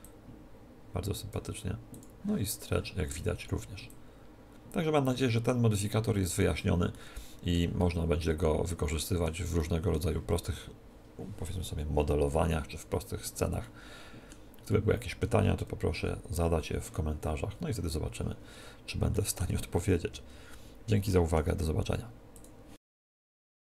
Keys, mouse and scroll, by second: 0.0-5.8 drag, 6.9-11.4 middle drag, 11.4-13.6 drag, 13.6-23.6 middle drag, 20.0 KP_1.